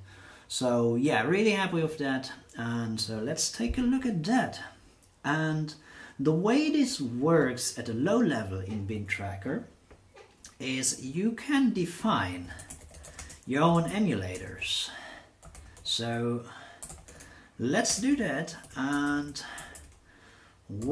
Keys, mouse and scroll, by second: 7.3 click, 11.7-20.9 typing.